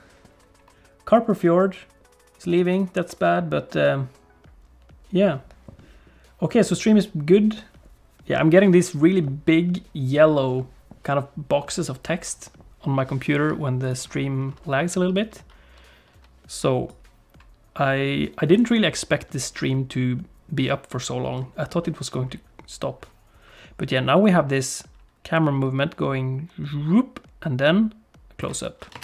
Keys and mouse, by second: 13.8 click, 16.9-28.5 drag.